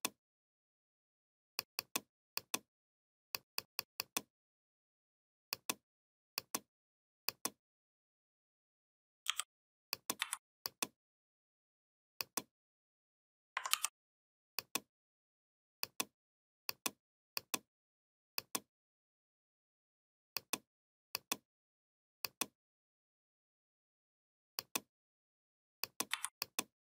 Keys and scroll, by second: 9.1 i, 10.0 v, 13.5 ctrl+g, 25.9 v.